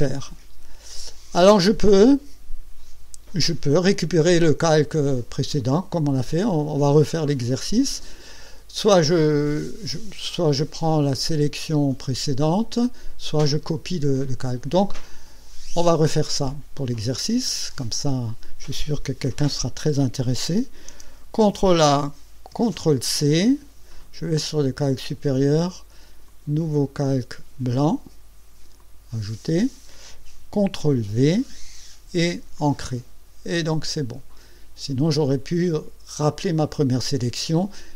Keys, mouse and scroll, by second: 16.5 click, 21.4 ctrl+a, 22.5 ctrl+c, 24.4 click, 26.3 click, 28.8 click, 30.8 ctrl+v, 32.6 click.